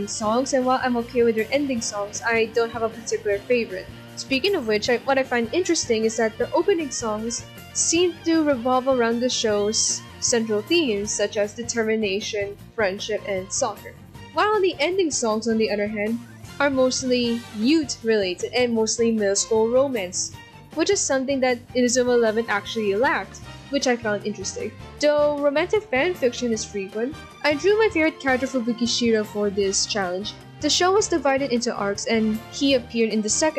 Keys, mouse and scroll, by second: 1.0 ctrl+-, 1.0 ctrl+=, 1.5 ctrl+z, 3.0 ctrl+-, 4.0 scroll up 1, 17.3 ctrl+-, 20.3 right click, 20.7 right click, 24.4 ctrl+-, 25.7 ctrl+=, 26.3 ctrl+z, 26.8 right click, 27.6 right click, 29.7 ctrl+=, 30.0 ctrl+-, 30.9 ctrl+=, 31.7 right click, 32.2 ctrl+-, 32.4 ctrl+=, 33.3 ctrl+z.